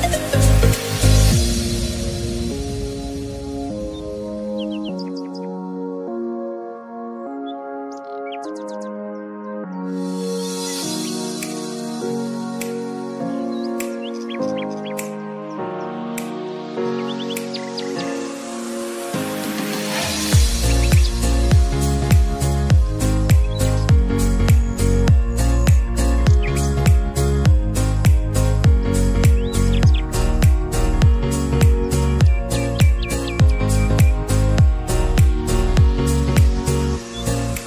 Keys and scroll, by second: 21.5 space.